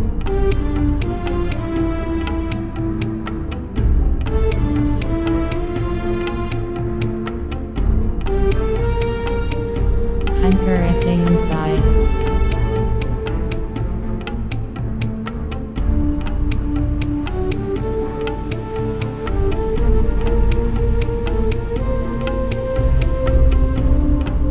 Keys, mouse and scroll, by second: 2.0 click, 2.3 middle click, 2.5 middle click, 2.6 Tab, 4.5 right click, 5.9 KP_1, 6.5 z, 8.0 g, 9.2 click, 9.9 e, 10.4 g, 11.9 click, 12.6 z, 13.6 KP_7, 15.0 Tab, 15.9-16.6 middle drag, 16.6 click, 17.5 middle drag, 18.5 Tab, 20.6 i, 22.4 Return, 23.0 BackSpace, 23.1 BackSpace, 23.5 BackSpace.